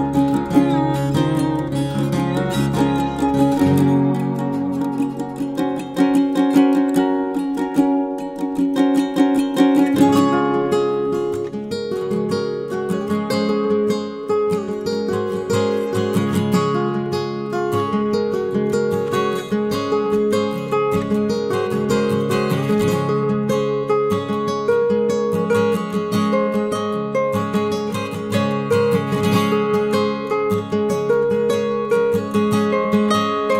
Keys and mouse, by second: 0.5-0.8 middle drag, 1.0 middle click, 1.6 shift+middle drag, 2.2 shift+middle click, 3.5-3.9 middle drag, 4.1 shift+middle click, 4.4 middle drag, 4.9 shift+middle click, 5.3-5.6 middle drag, 5.7 shift+middle click, 6.4 shift+middle click, 7.0 middle drag, 7.5 shift+middle drag, 7.9 middle click, 8.8 shift+middle click, 9.4 shift+middle click, 10.0 middle click, 10.8 Tab, 12.2 ctrl+r, 16.4 click, 17.0 shift+middle click, 17.4 middle drag, 17.8 shift+middle click, 18.5 middle click, 19.1 shift+middle click, 19.4 middle click, 19.9 shift+middle click, 20.4 middle drag, 21.0 middle drag, 21.7 middle click, 22.1 shift+middle click, 22.4 middle click, 23.0 shift+middle click, 23.7-24.1 middle drag, 24.3 shift+middle click, 25.0 middle click, 27.1 middle click, 28.6 click, 29.2 shift+middle click, 29.6 middle click, 30.2 shift+middle click, 31.1 shift+middle drag, 32.0 middle click, 32.9 click.